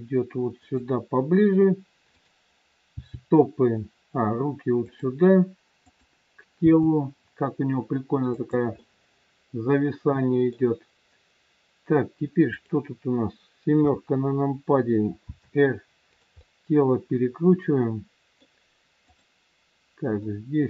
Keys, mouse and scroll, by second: 2.0 click, 2.9 g, 5.8 click, 6.6 g, 8.8 middle click, 12.4 click, 13.8 KP_7, 15.3 r, 16.4 middle click, 19.0 click, 20.2 middle click.